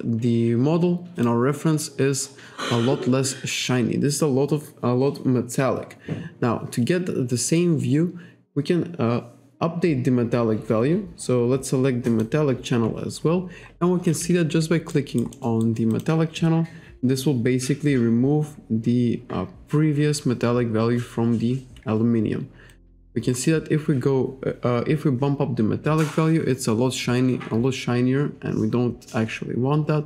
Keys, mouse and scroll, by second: 1.2 click, 2.0-2.4 scroll up 1, 2.7-3.1 scroll down 1, 6.1 scroll up 1, 12.1 click, 13.3 scroll up 1, 13.7-14.1 scroll down 1, 15.0 alt+right click, 15.4 alt+middle click, 15.7 alt+right click, 16.0 alt+click, 22.8 click.